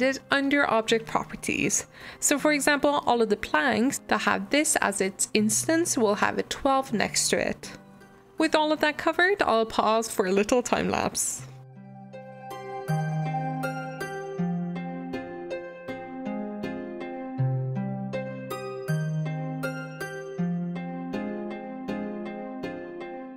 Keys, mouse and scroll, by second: 0.6 click, 11.6 middle click, 11.8 scroll up 1, 11.9 click, 12.4 shift+click, 12.6 shift+click, 12.8 alt+d, 13.3 g, 14.0 r, 14.7-15.2 middle drag, 15.2 g, 15.6 shift+middle click, 15.7 scroll down 2, 15.8 middle click, 16.3 m, 17.1 click, 17.6 click, 17.7 scroll up 3, 17.8 shift+middle click, 18.0 click, 18.1 g, 19.1 g, 19.4 click, 19.5 scroll down 4, 19.6-20.2 scroll up 4, 19.8-20.2 shift+middle drag, 20.2 click, 20.3 scroll down 1, 20.5 shift+d, 21.0 scroll up 1, 21.2 ctrl+m, 21.3 click, 21.8 shift+click, 21.9 shift+click, 22.1 alt+d, 22.9 r.